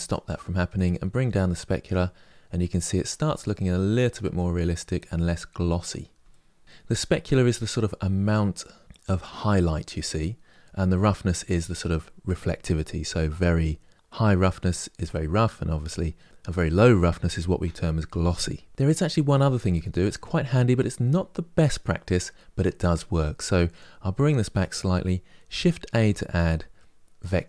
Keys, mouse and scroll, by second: 0.7-3.2 drag, 3.2-27.4 middle drag.